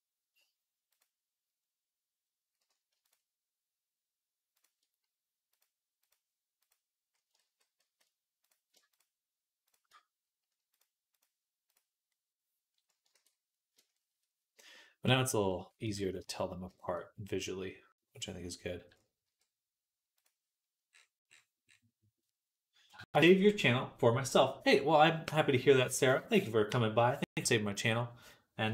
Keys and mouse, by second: 0.7 click, 2.9 shift+click, 4.4 shift+click, 5.3-6.5 drag, 5.3-6.5 middle drag, 7.2 ctrl+z, 7.7 ctrl+z, 8.3 click, 8.3 middle click, 8.3 right click, 8.8 click, 8.8 middle click, 8.8 right click, 10.5-11.6 drag, 10.5-11.6 middle drag, 10.5-14.8 right drag, 13.0 ctrl+s, 14.8-22.1 drag, 15.7 z, 19.1 z, 22.1-28.7 right drag.